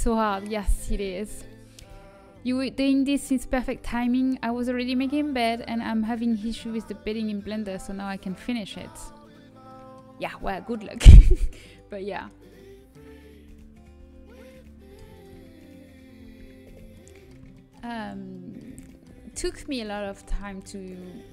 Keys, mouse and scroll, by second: 9.2 scroll up 1, 9.3-12.5 middle drag, 11.9 click, 13.4 z, 13.9 z, 16.1 z, 16.6 z, 16.9-17.9 middle drag, 21.1 z.